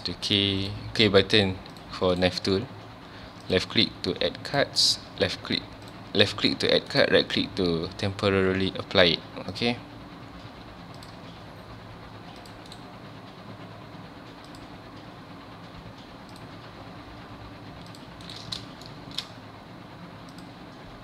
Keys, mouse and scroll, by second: 18.9-21.0 shift+middle drag.